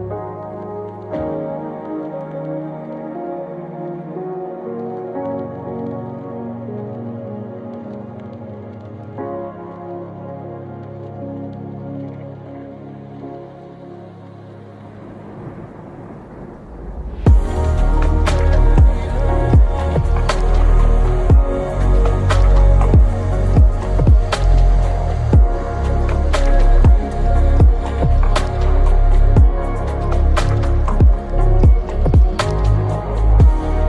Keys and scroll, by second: 1.5-5.9 typing, 2.6 Return, 4.7 Return, 6.2 ctrl+s, 27.1-33.4 typing, 29.9 Return.